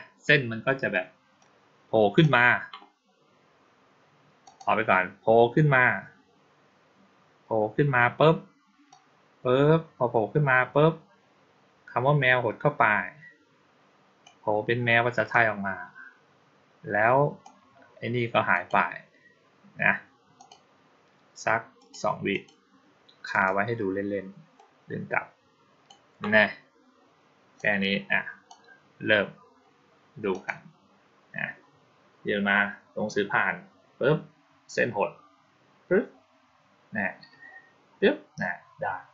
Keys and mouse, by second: 1.3 click, 4.3 click, 8.7-14.1 drag, 15.2-17.3 drag, 18.4 click, 20.2 click, 21.6 click, 22.2 click, 23.2 click, 24.4-25.7 drag, 27.4-28.3 drag, 30.2 click.